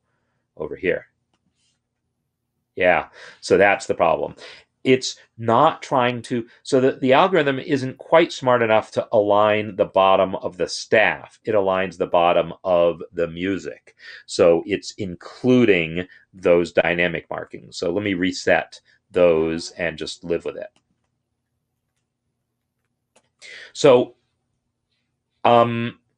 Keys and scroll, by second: 1.8 ctrl+Up, 2.4 ctrl+Up, 3.6 Escape, 16.8 ctrl+r, 22.3 Escape, 23.0 ctrl+r, 23.4 Escape.